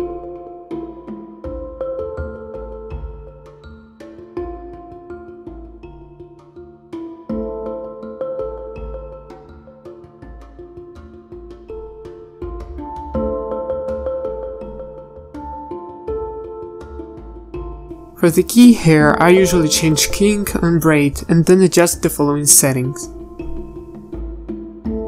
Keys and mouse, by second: 7.3 BackSpace.